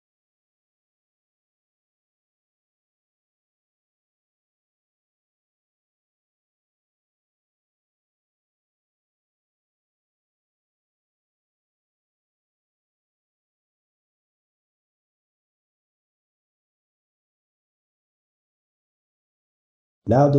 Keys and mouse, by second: 0.7 shift+click, 1.5 alt+a, 4.7-7.7 middle drag, 7.7 click, 8.4 click, 8.8 shift+click, 9.8 ctrl+z, 10.2 shift+click, 10.7 2, 11.2 click, 11.5 shift+click, 12.0 2, 12.7 click, 13.3 shift+click, 13.8 2, 14.4-19.1 ctrl+middle drag, 19.1 `, 19.6 z, 20.1 click.